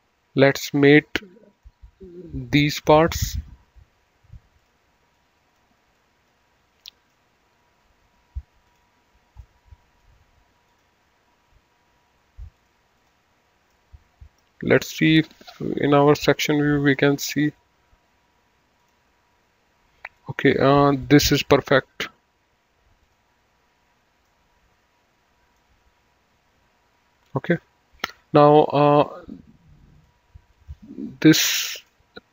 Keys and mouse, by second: 1.5 click, 2.7 click, 4.5 click, 6.7 middle click, 8.6 click, 9.4 middle click, 10.6 click, 12.5 click, 13.7 middle click, 15.3 click, 16.6 click, 18.8 click, 20.1 middle click, 22.9 click, 24.2 middle click, 29.9 click.